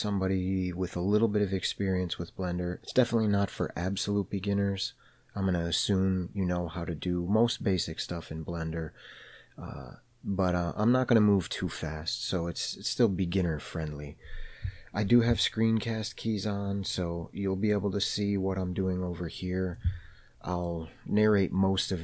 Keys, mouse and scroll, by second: 17.4-18.1 middle drag, 20.2-21.1 middle drag.